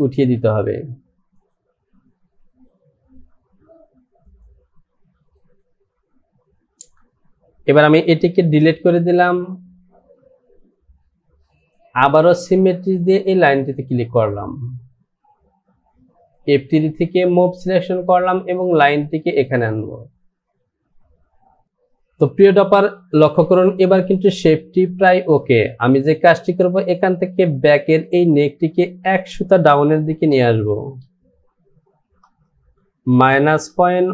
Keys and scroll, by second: 32.2 KP_0, 32.5 Down.